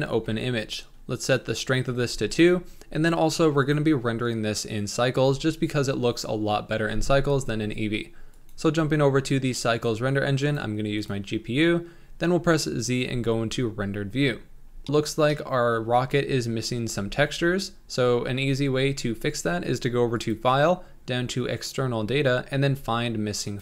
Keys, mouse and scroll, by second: 0.0-2.4 drag, 2.8-3.6 scroll up 1, 9.9-13.9 drag, 13.9 z, 14.8 shift+middle click, 15.0 scroll up 2, 15.3-16.8 shift+middle drag, 16.8 z, 18.8 z, 20.1-23.6 drag.